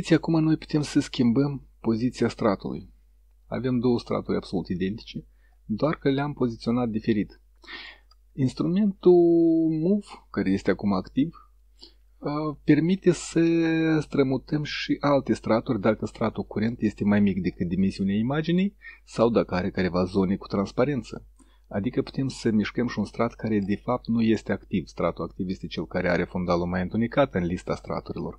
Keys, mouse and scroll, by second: 1.1-3.7 drag, 6.6 click, 9.7 click.